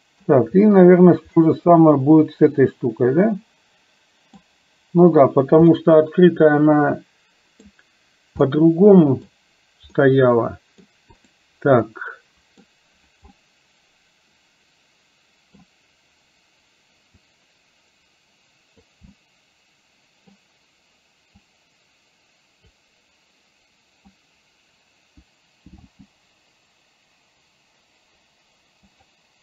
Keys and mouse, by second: 1.4-4.6 middle drag, 5.8-7.8 middle drag, 8.6 middle click, 10.1 middle click, 12.0 middle click, 13.4-15.7 middle drag, 17.4-19.0 drag, 19.2-20.4 middle drag, 21.6-22.8 drag, 26.0 g.